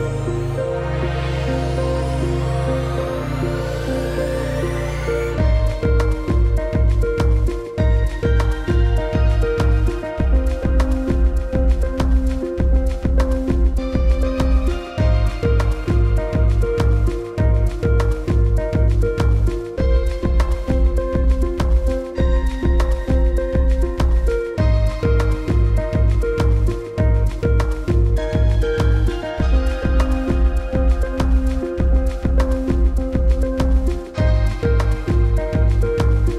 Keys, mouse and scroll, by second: 2.4 ctrl+z, 2.6-3.0 alt+scroll up 2, 3.0 alt+click, 4.3 v, 4.5 click, 4.6 scroll down 1, 5.3 click, 5.7 g, 6.1 space, 6.4 click, 9.4-12.0 typing, 12.2 click, 17.3 ctrl+g, 17.7 scroll down 1, 17.8 click, 17.9 space, 18.3 click, 19.9-20.8 scroll up 3, 20.3 click, 20.9 click, 21.0 space, 21.6 scroll down 1, 21.9 space, 22.9 alt+space, 23.0-23.8 alt+scroll up 2, 23.8 click, 25.1 shift+d, 25.6 i, 27.6 ctrl+Return, 28.5 shift+click, 30.2-30.6 typing, 31.2 click, 32.7 shift+click, 35.4 scroll up 1, 35.7 click.